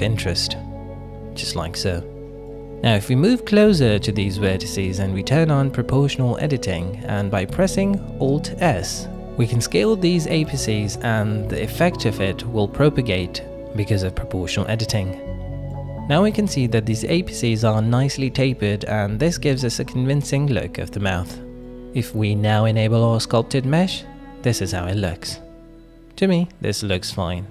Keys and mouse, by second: 1.3 alt+z, 2.5 middle click, 3.0 shift+middle click, 4.2 middle click, 5.6 shift+middle click, 6.0 middle click, 6.6 alt+z, 7.2 alt+z, 7.5 middle click, 10.2 middle click, 12.5 alt+s, 16.7 middle click, 17.4 Tab, 17.8 shift+click, 18.2 drag, 18.8 middle click, 19.2 click, 20.2-20.8 drag, 21.2-22.5 drag, 22.7 /, 23.6-25.0 drag, 25.2 click, 25.7-27.5 middle drag.